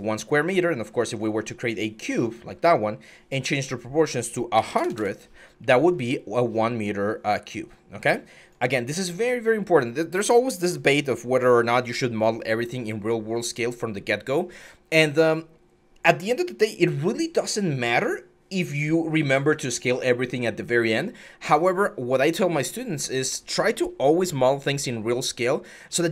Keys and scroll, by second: 4.3 1, 4.5 0, 4.6 0, 4.7 Return.